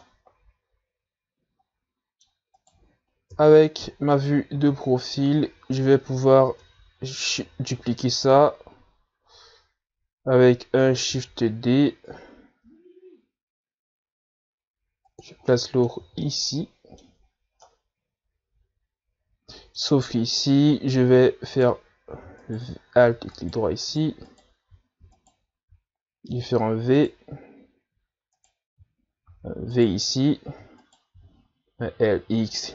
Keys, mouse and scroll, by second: 0.3-0.9 middle drag, 0.9 scroll up 3, 1.2-3.8 middle drag, 3.8 right click, 4.6 KP_3, 5.8 z, 6.2-6.5 scroll down 1, 6.5-7.0 scroll up 2, 7.0-7.4 scroll down 1, 7.4-7.9 scroll up 2, 7.9 Tab, 8.3 scroll down 2, 8.8-9.7 scroll up 4, 11.1-11.7 scroll down 1, 11.7-12.4 scroll up 1, 12.5 shift+d, 16.8 middle click, 17.3 z, 17.5 scroll down 2, 17.7 middle click, 18.5-20.4 scroll up 2, 20.4-21.3 scroll up 1, 21.3-22.8 scroll up 1, 22.8 alt+right click, 23.7 alt+right click, 24.6 alt+right click, 25.1 alt+right click, 25.5 alt+right click, 26.4 alt+right click, 27.8 v, 29.6 alt+right click, 30.6 v, 32.1 right click, 32.4 l.